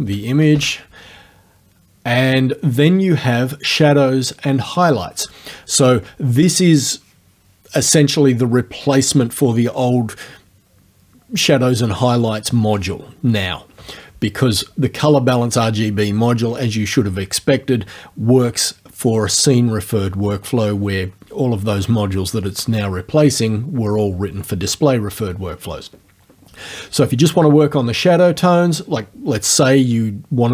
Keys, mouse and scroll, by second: 0.4 KP_0, 0.5 KP_Enter, 2.3 click.